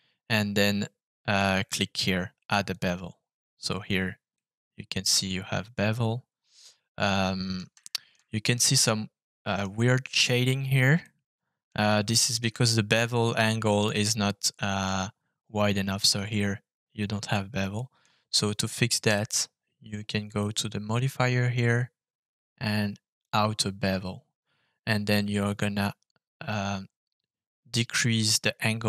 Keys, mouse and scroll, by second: 3.5-4.3 scroll up 2, 4.3 middle click, 5.6 click, 6.8 middle click, 7.3 click, 7.7 shift+middle click, 8.2-9.6 middle drag, 11.0 middle click, 12.0 shift+middle click, 12.5-13.1 scroll up 1, 13.2-14.8 middle drag, 17.7 middle click, 20.2 click, 23.1 click, 25.4-28.8 drag.